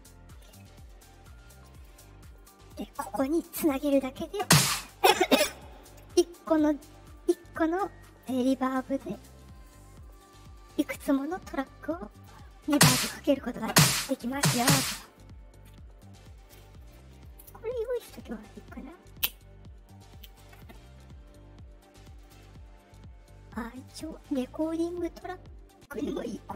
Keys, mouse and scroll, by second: 1.6 click, 2.3 click, 3.0 click, 5.6 click, 6.6 click, 7.1 click, 9.0 click, 9.4 click, 9.9 click, 12.0 click, 13.4 click, 22.1 click, 23.8 click, 25.9-26.5 drag.